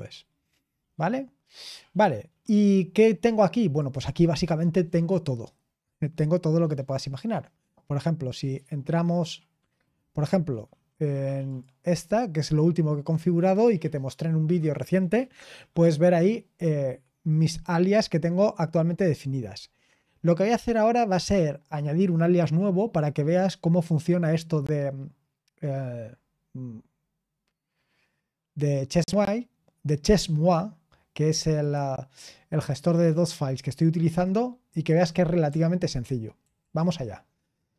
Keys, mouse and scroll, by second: 0.8-1.4 scroll down 1, 1.4-3.8 scroll up 1, 3.8-11.8 drag, 13.2 click, 31.6 middle click, 31.9-33.3 drag, 36.4 ctrl+l.